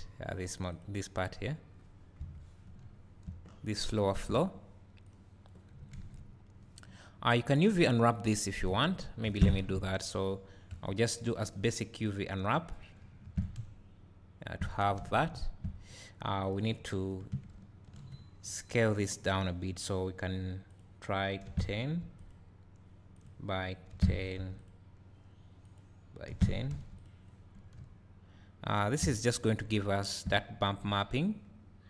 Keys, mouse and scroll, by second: 2.2 KP_Divide, 3.5 scroll up 1, 3.9 `, 5.1-16.5 drag, 6.6 `, 9.3 Tab, 9.7 a, 13.3 Tab, 13.6 `, 17.6 ctrl+t, 22.2 click, 24.6 click, 27.0 click, 30.6 scroll down 1, 31.3 `.